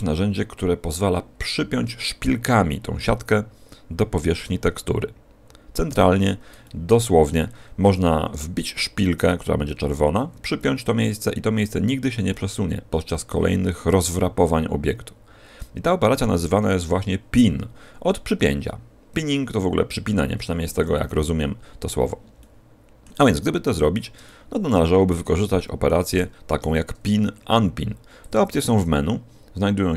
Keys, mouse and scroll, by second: 3.3-5.5 scroll down 7, 5.8-6.5 scroll down 2, 6.5 shift+middle click, 9.1 right click, 21.6-22.2 scroll up 1, 22.3 middle click, 22.3 scroll up 3, 23.3 scroll down 4, 23.8 scroll down 4, 24.2 shift+middle click, 25.3 shift+middle click, 28.1 click.